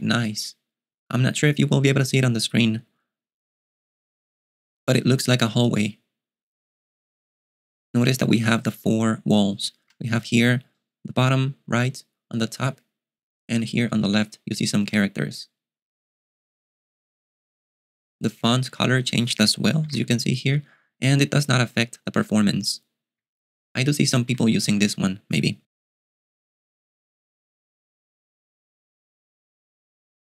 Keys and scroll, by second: 19.8-24.2 typing, 25.4-26.1 typing.